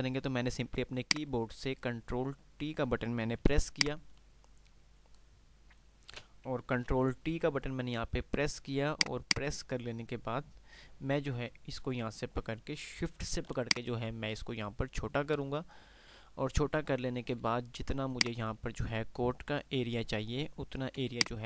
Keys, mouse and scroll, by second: 13.8 click.